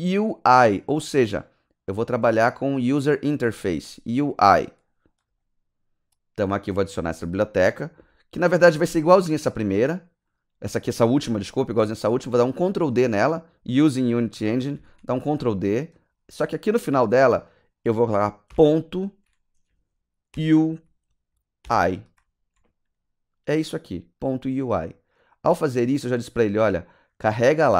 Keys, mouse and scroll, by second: 5.1 click, 6.3 click, 8.3 click, 9.0 click, 10.2 click, 14.7 ctrl+d, 15.9 click, 18.4 ., 20.3 shift+u, 21.6-22.1 typing, 24.5 click, 25.1 click, 25.7 click, 26.5 click, 27.3 click.